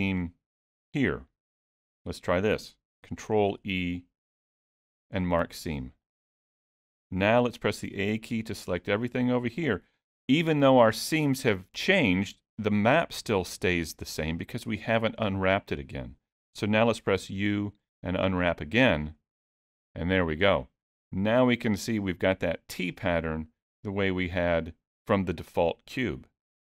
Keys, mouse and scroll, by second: 0.8 click, 3.5 ctrl+e, 7.9 a, 17.2 u, 22.9 middle click.